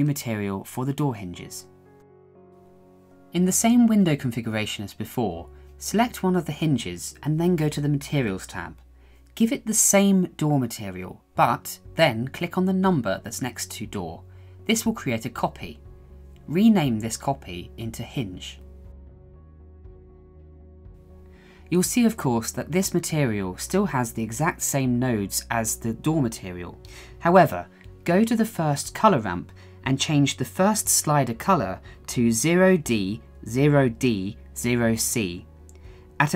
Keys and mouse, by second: 5.7 click, 7.2-8.4 drag, 16.3 click, 17.3-19.9 drag, 20.4-21.6 shift+middle drag, 22.3 shift+middle click.